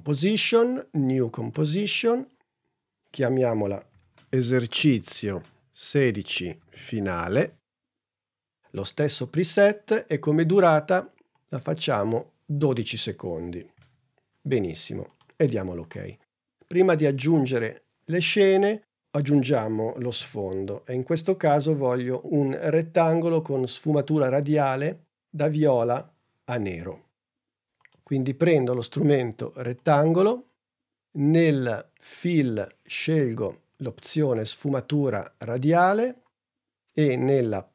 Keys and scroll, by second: 3.3-5.7 typing, 6.9-8.2 typing, 12.6 l, 13.2 2, 20.1 super+Tab.